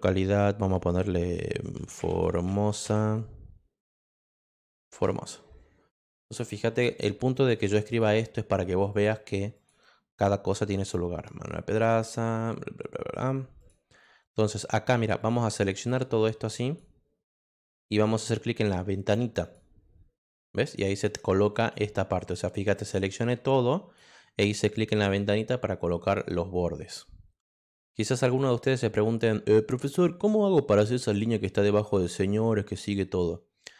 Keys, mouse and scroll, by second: 1.5-2.8 typing, 4.1 ., 6.2 click, 7.3 click, 7.9 click, 8.9 click, 9.5 click, 13.6 click, 15.2-16.7 drag, 19.4 click, 20.2 click, 22.6-23.9 drag, 26.0 click.